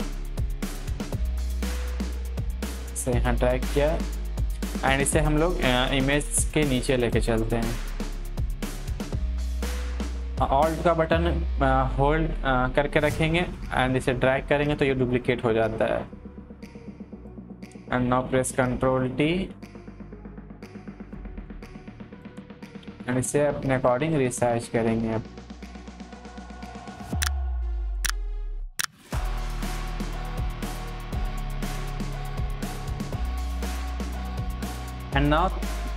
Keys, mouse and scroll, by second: 6.1-13.6 drag, 13.6-18.1 alt+drag, 18.1 ctrl+t, 19.0-21.7 drag, 22.7 ctrl+t, 23.1-27.7 drag, 28.0 ctrl+t, 28.1-30.9 drag, 31.1 ctrl+t, 31.2 click, 31.8 click, 32.3 ctrl+z, 32.5 click, 33.3 Up, 33.4 click, 33.5 Up, 33.7 click, 34.3 Down, 34.4 click.